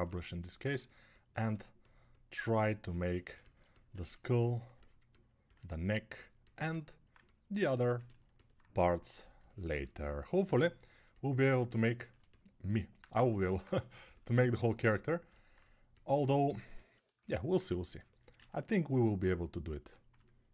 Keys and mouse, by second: 3.7-8.0 ctrl+alt+right drag, 8.0-11.3 alt+drag, 11.3-20.5 ctrl+alt+shift+right drag.